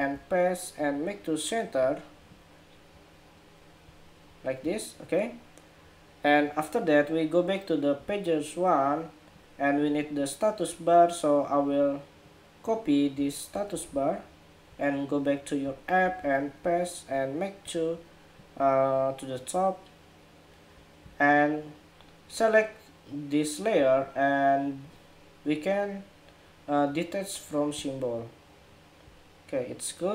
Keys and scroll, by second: 13.4 super+c, 15.7 super+v.